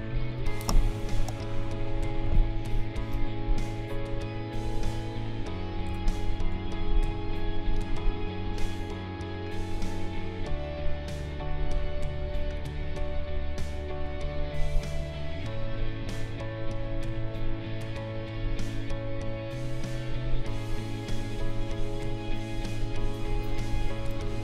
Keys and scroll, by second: 1.1 space, 4.8 ctrl+a, 6.5 ctrl+g, 23.5 ctrl+=.